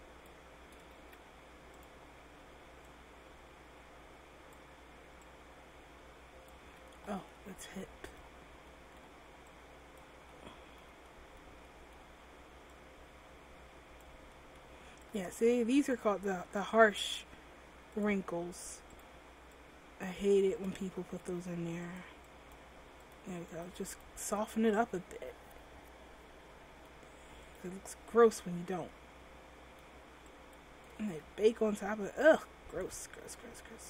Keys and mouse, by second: 1.2 ctrl+z, 6.8 ctrl+z, 9.7-18.0 drag, 21.1 ctrl+z, 24.3-26.9 drag, 27.6-28.7 middle drag, 28.7 ctrl+z, 29.1 click, 31.2 ctrl+z, 31.6 click.